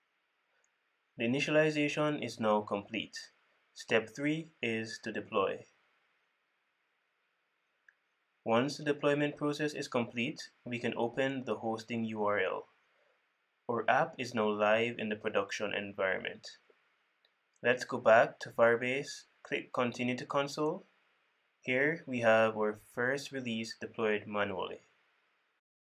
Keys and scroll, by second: 5.8 super+v, 18.6 super+w.